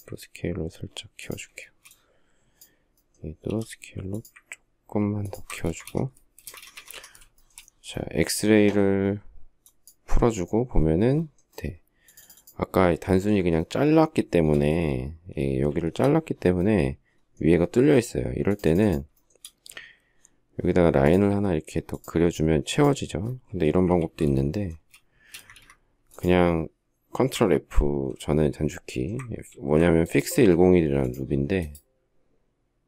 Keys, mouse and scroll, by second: 1.0 ctrl+click, 1.4 space, 3.3 s, 5.0 ctrl+click, 5.4 space, 5.5 Escape, 6.2 space, 6.5 Escape, 6.7 Escape, 7.1 shift+middle click, 14.9 shift+s, 19.0 shift+double middle click, 23.8 ctrl+z, 24.5 space, 25.1 space, 25.2 Escape, 29.2 ctrl+f.